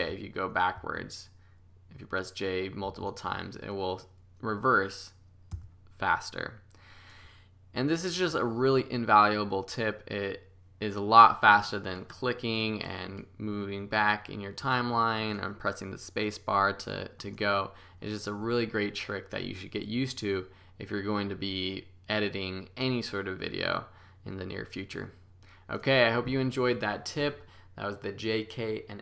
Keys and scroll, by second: 0.0 j, 2.8 j, 5.5 k.